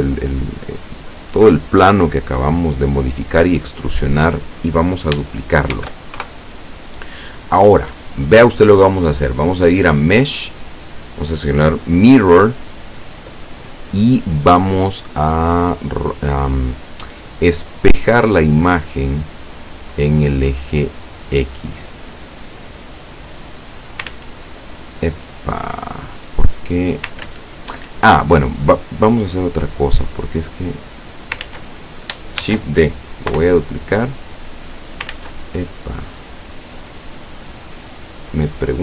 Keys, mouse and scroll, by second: 5.8 shift+d, 6.3 shift+KP_Enter, 10.0 click, 18.5 click, 21.4 click, 22.7-24.2 drag, 24.2 ctrl+z, 25.3-27.3 ctrl+middle drag, 27.3 ctrl+z, 27.9-29.1 ctrl+middle drag, 29.4-30.2 middle drag, 30.7-31.5 drag, 31.5 ctrl+z, 32.5 shift+d, 33.4 Return, 34.0-35.2 drag, 35.2 ctrl+z, 35.8-36.6 ctrl+scroll up 3, 36.8-37.1 scroll down 2, 38.7-38.8 middle drag.